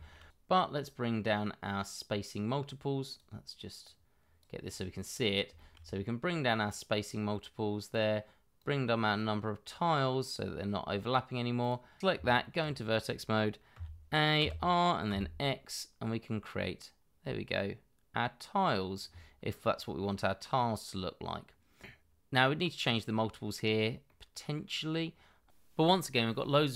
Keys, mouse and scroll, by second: 4.6-5.2 scroll up 1, 5.2 scroll down 1, 5.5 shift+middle click, 12.0 Escape, 12.1 Tab, 13.7 a, 14.4 r, 15.0 x, 20.0 middle click, 23.6 middle click, 24.2-24.6 scroll up 1, 24.6 middle click, 25.1-25.9 scroll down 1, 25.9 Tab.